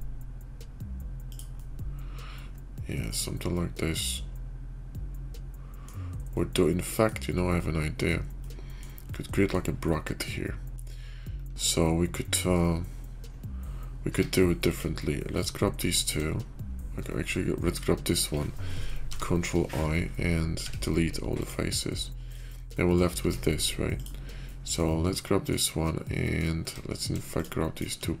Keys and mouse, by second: 1.5-5.8 middle drag, 6.2 middle click, 7.4 middle click, 8.3-8.7 middle drag, 9.0 middle click, 9.8-10.7 drag, 14.0 Tab, 15.7 click, 17.0 middle click, 18.9 ctrl+i, 20.5 x, 22.7 middle click, 23.1 Tab, 23.7 click, 24.4 middle click, 24.8 click, 25.7 click, 26.4 Tab, 27.0-27.8 shift+middle drag.